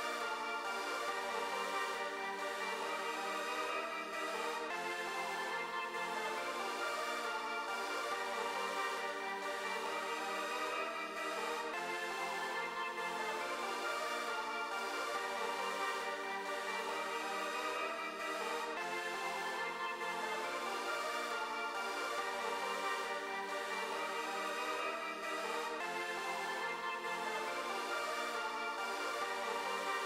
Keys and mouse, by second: 0.3 click, 3.9 click, 6.2-7.4 drag, 9.6 click, 10.6 click, 12.8 click, 14.6 click, 16.9-19.5 drag, 21.8-22.8 drag, 24.1-25.8 drag.